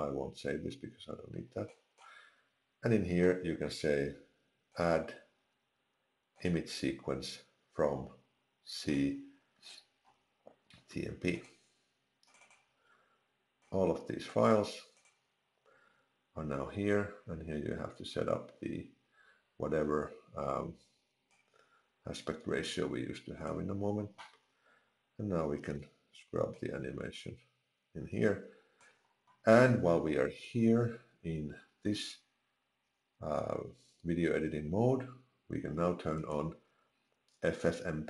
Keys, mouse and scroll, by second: 26.9 click, 29.2 click, 31.0 click, 36.8 click.